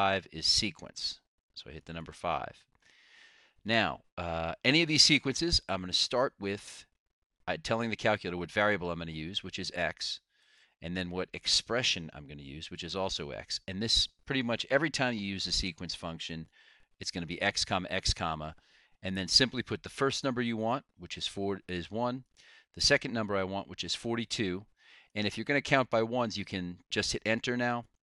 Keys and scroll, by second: 2.2 5, 10.8 ,, 16.7 ,, 20.9 1, 22.6 ,, 24.5 4, 25.4 2.